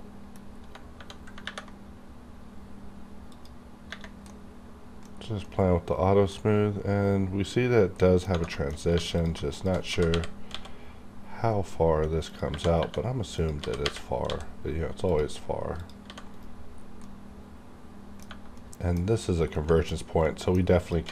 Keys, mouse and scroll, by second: 0.0 middle click, 0.4 scroll up 1, 1.4 ctrl+`, 3.3 click, 3.3 click, 4.3 middle click, 5.1-5.4 scroll down 1, 5.4-8.0 middle drag, 8.1 scroll down 1, 8.3 Tab, 8.5 shift+middle click, 8.7 shift+scroll up 1, 8.9 3, 9.1 click, 9.5 shift+click, 9.9 g, 12.3 click, 12.5 1, 13.3 click, 13.6 g, 15.1 click, 16.0 g, 16.3 right click, 16.8 scroll down 1, 17.0 middle click, 18.6 middle click, 18.9-19.5 scroll down 1, 19.5 middle click, 20.0 scroll up 1, 20.2 middle click, 20.8 click, 21.0 g.